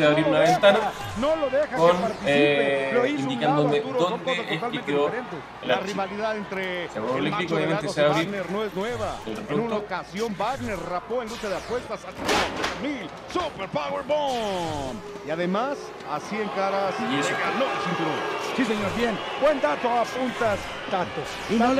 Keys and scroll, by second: 0.5 alt+super+-.